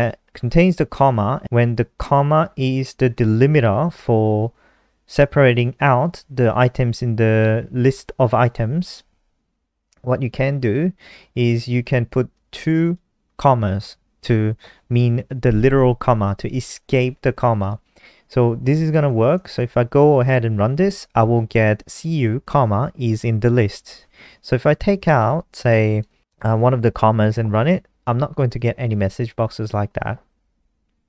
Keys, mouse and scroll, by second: 0.5 shift+Home, 1.5 shift+Left, 2.2 shift+Up, 2.3 shift+Up, 2.5 shift+Up, 2.6 shift+Up, 3.1 shift+Up, 3.2 ctrl+v, 3.6 ctrl+s, 11.7 click, 18.7 ctrl+s, 18.9 F5, 23.2 click, 25.0 Right, 25.3 BackSpace, 27.7 ctrl+s, 28.4 F5.